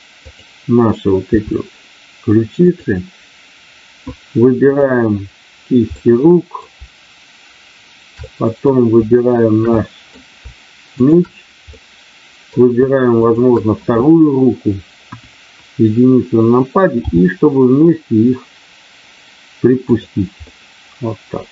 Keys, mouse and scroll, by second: 1.3 r, 2.7 click, 4.7 click, 5.9 middle click, 8.3 middle click, 9.6 middle click, 10.9 shift+click, 11.8 middle click, 13.1 shift+click, 15.0 KP_1, 17.0 g, 19.8 click, 20.4-21.5 scroll up 1.